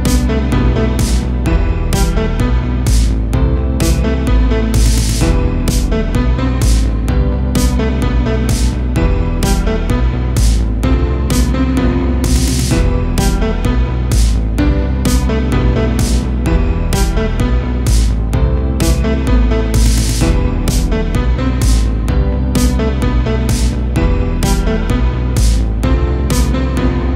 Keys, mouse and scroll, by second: 1.1-2.2 ctrl+drag, 2.2 ctrl+z, 2.8-4.0 ctrl+drag, 4.0-6.1 middle drag, 6.1 click, 7.0 ctrl+z, 7.8-9.0 drag, 9.0-11.0 middle drag, 11.0-12.1 ctrl+drag, 12.1 ctrl+z, 12.8 ctrl+click, 13.7-14.9 middle drag, 14.9-16.5 drag, 16.5-19.3 middle drag, 19.3-20.5 ctrl+drag, 20.5-21.9 middle drag, 21.9 ctrl+click, 22.8 ctrl+z, 23.3-24.4 drag, 24.4 ctrl+z, 25.5 middle click, 26.4 ctrl+z, 26.7 ctrl+z.